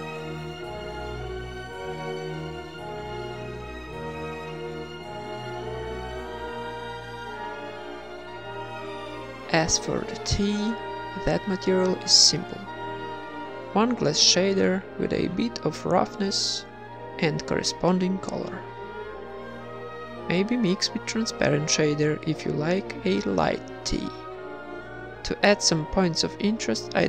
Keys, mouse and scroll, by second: 0.5 shift+a, 3.3-4.7 drag, 4.7 KP_0, 5.4 middle click, 6.3-7.5 drag, 7.8-9.5 drag, 7.8 x, 7.9 shift+a, 10.4 z, 12.3-13.5 middle drag, 12.3-13.3 scroll up 1, 13.7 click, 15.5 click, 16.7 click, 18.8 ctrl+s, 19.4 click, 21.6 ctrl+v, 21.9 ctrl+s, 24.3 ctrl+s, 24.3 KP_1, 24.3 KP_5, 24.4 z.